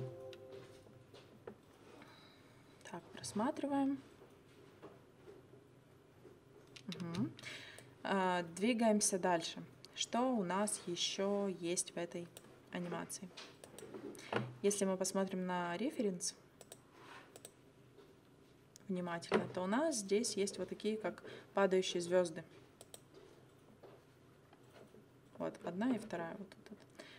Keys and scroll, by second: 7.1 space.